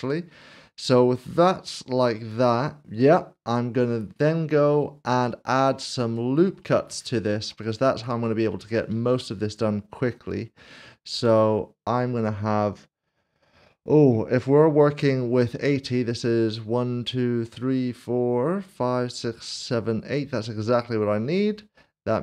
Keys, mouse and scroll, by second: 0.0 typing, 1.6 right click, 3.0 right click, 3.7 middle click, 4.3 click, 4.5 middle click, 6.4 click, 6.5 scroll down 1, 6.9 shift+middle click, 7.6 shift+middle click, 8.9 ctrl+r, 9.9-13.2 scroll up 1, 13.2-15.2 scroll down 1.